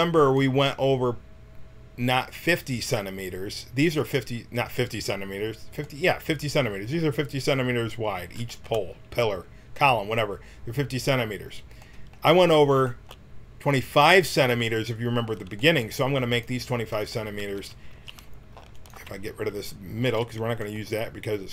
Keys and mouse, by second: 13.2 middle click, 14.8-20.0 drag, 17.3 Tab, 17.9 a, 20.0 x.